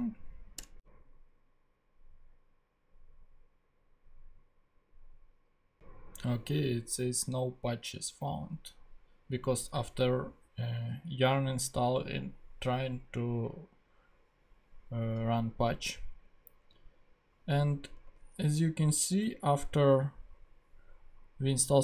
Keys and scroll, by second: 0.6 Return, 15.7 super+Tab, 18.1 ctrl+Tab.